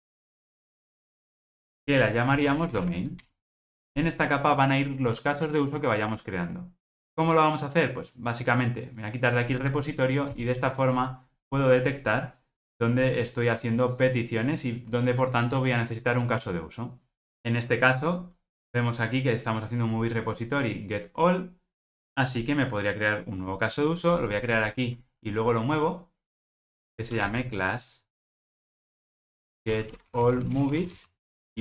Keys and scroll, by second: 28.4 Return.